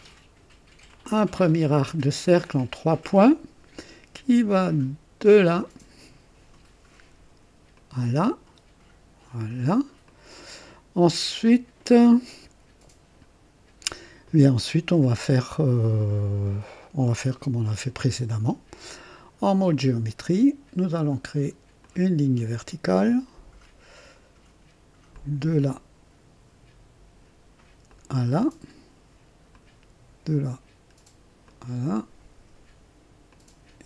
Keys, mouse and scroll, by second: 0.9 click, 2.9 click, 5.6 click, 7.7 click, 10.0 click, 19.7 click, 21.8 click, 25.1 click, 27.9 click, 29.5 click, 31.4 click, 33.3 click.